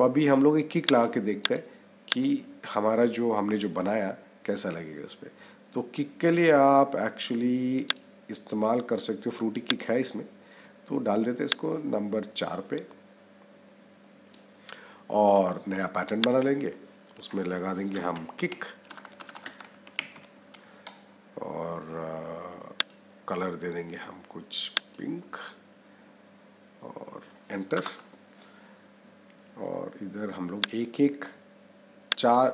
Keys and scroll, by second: 17.8 Caps_Lock, 18.1 k, 18.7 BackSpace, 19.6 k, 27.6 Return.